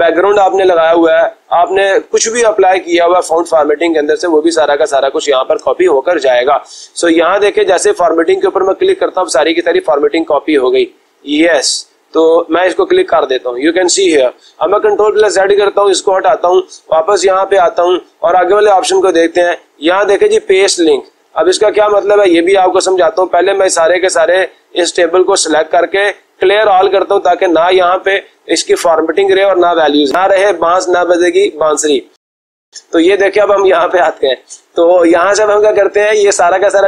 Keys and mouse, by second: 12.6 click, 15.1 ctrl+z, 17.6 click, 22.3-23.5 drag, 23.6-24.7 drag, 26.2-27.2 drag, 27.8 click, 29.8-30.8 drag, 31.4-33.4 drag.